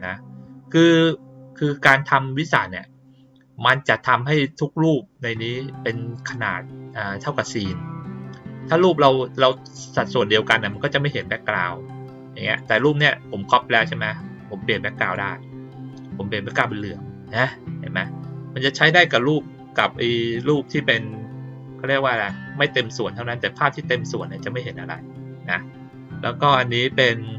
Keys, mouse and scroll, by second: 9.3 click, 12.4 click, 14.9 click, 16.6 click, 18.9 click, 20.5 click, 22.1 click.